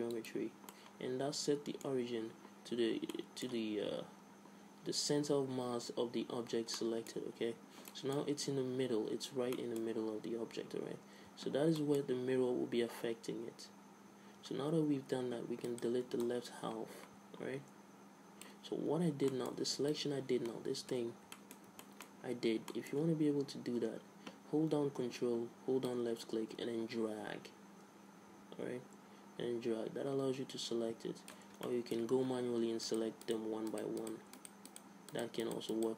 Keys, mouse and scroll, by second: 0.9-2.6 middle drag, 3.3-5.1 middle drag, 6.9-11.3 middle drag, 11.3 Tab, 11.9-13.8 middle drag, 15.0 z, 15.8 right click, 17.6 click, 18.2 middle click, 19.1 a, 19.5 middle click, 20.1-22.0 drag, 21.8 a, 26.0-28.0 drag, 31.8 middle click, 32.2 a, 32.7 z, 33.0 click, 33.7-35.9 right drag.